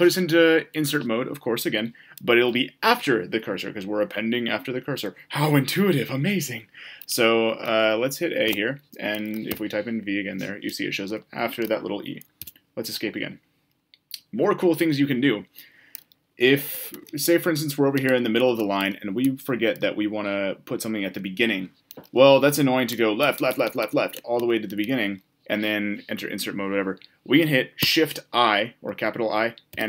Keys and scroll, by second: 8.4 a, 12.4 Escape, 27.7 shift+i.